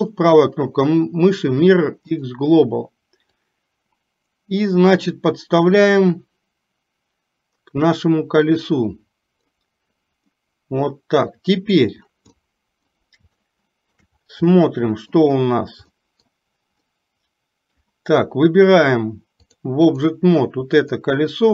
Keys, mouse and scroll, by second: 3.6-9.6 drag, 10.4-11.7 middle drag, 12.5 middle click, 13.6 shift+middle click, 14.6 middle click, 16.0 middle click, 17.0 middle click, 19.7 click, 21.0 click.